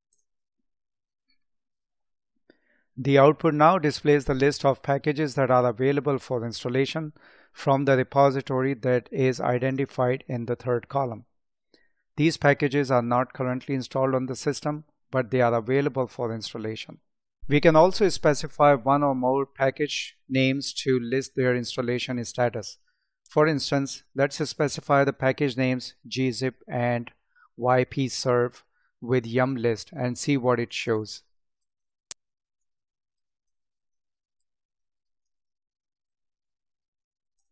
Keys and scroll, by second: 32.4 space, 33.9 space, 35.2 space.